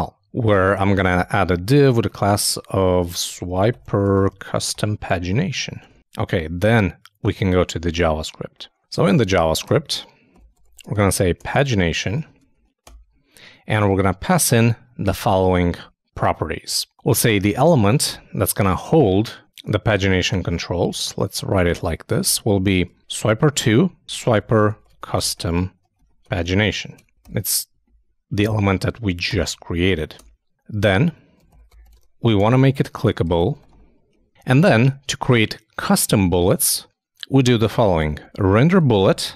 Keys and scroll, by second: 6.4 super+s, 12.0 shift+Return, 12.2 shift+;, 12.3 shift+space, 12.5 shift+[, 12.8 shift+Return, 17.4-18.2 typing, 20.6 shift+BackSpace, 20.8 shift+9, 22.2 shift+', 32.9 shift+Return, 33.0 shift+;, 33.2 shift+space, 38.5-39.3 typing.